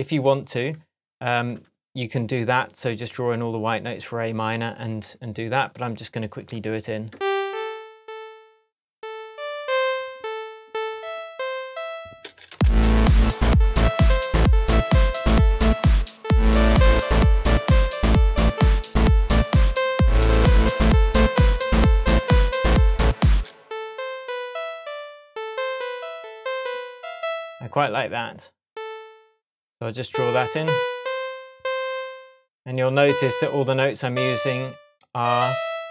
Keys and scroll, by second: 0.6 shift+Tab, 12.5 space, 23.3 space, 35.1 Up.